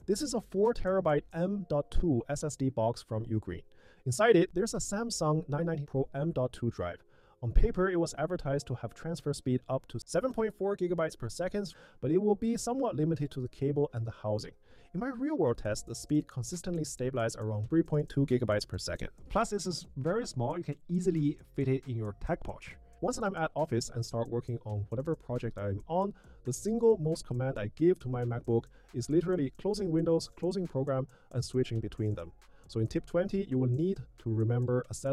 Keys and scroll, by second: 27.1 super+w, 29.9 super+q, 32.6 super+q, 34.7 super+q.